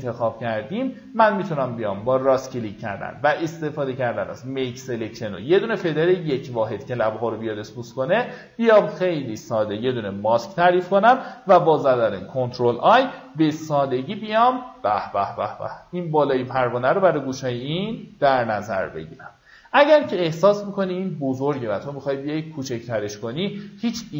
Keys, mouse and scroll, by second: 1.1 right click, 3.9 click, 12.7 v, 13.2 alt+scroll down 1, 15.0-15.8 alt+scroll up 2, 16.5-17.0 alt+scroll up 1, 17.7-18.6 alt+scroll up 1, 19.1-22.5 alt+scroll down 3, 22.5 alt+scroll up 1.